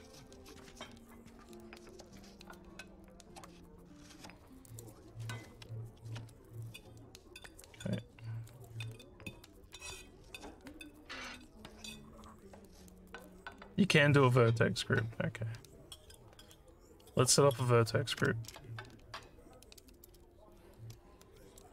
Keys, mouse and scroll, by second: 4.7 click, 8.5 click, 18.7 Tab, 21.3 alt+middle click.